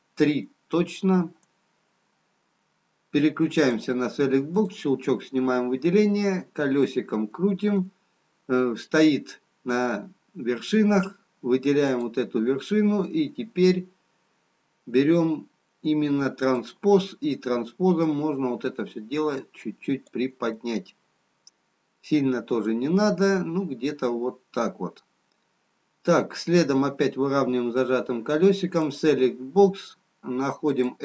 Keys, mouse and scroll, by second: 3.8 click, 4.7 click, 5.1 middle click, 11.8 click, 20.6 middle click, 30.4 click, 30.9 click.